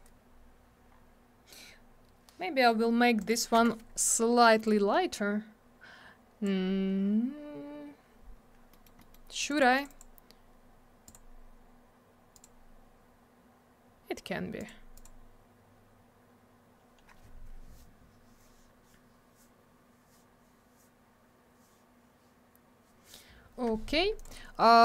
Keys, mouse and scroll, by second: 0.9-2.2 scroll down 1, 3.2 click, 3.3 click, 3.6 m, 4.6 click, 8.7 middle click, 8.8 middle click, 9.0 middle click, 9.1 double middle click, 9.4 click, 9.5 click, 9.5 click, 9.6 double click, 9.7 click, 9.8 click, 9.9 click, 10.0 double click, 11.1 click, 11.1 click, 12.3 click, 12.4 click, 14.6 click, 14.7 click, 14.9 click, 15.0 double click, 24.2 click, 24.2 click.